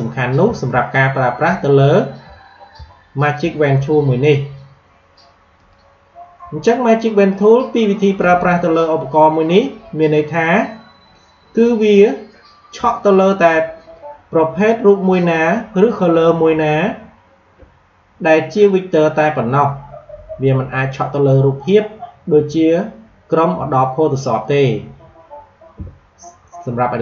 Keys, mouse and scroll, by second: 0.7 alt+scroll down 1, 1.9 alt+scroll down 1, 2.9-3.2 alt+scroll up 1, 5.5 click, 10.1 click, 14.6 click, 26.9-27.0 drag.